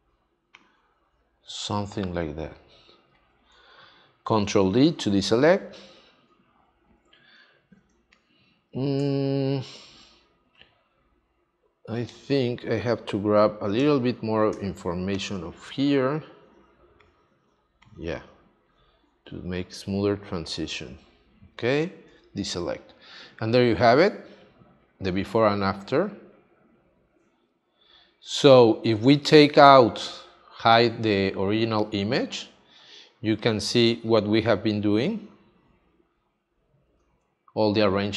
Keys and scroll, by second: 4.4 super+d, 4.8 space, 7.8 space, 10.7 super+z, 22.1 super+d, 29.0 space, 32.9 space.